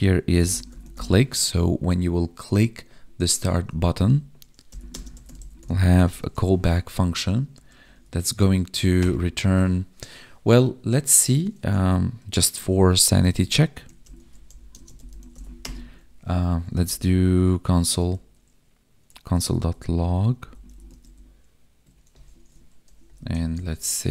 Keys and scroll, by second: 4.0 Right, 4.9 space, 6.9 Right, 13.1 ctrl+/, 14.7 space, 21.8 Tab.